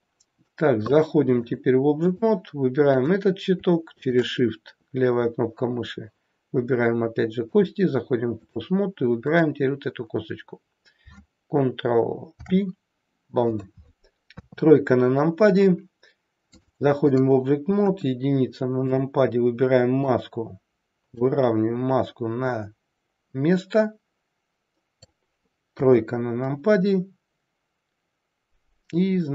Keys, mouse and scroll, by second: 1.4 click, 3.0 click, 4.0 shift+click, 7.5 click, 9.2 click, 12.2 ctrl+p, 14.2 KP_3, 16.4 click, 17.7 KP_1, 18.7 click, 20.0 click.